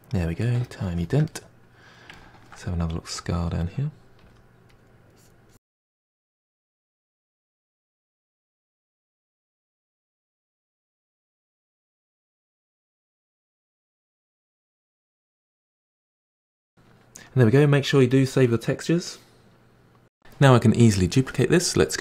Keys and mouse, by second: 1.6-6.3 ctrl+middle drag, 6.3 f, 7.0-11.3 drag, 11.3 f, 11.6-12.0 drag, 12.1 ctrl+z, 12.3 ctrl+z, 12.6-14.9 drag, 14.9-18.2 ctrl+middle drag, 18.2-20.0 drag.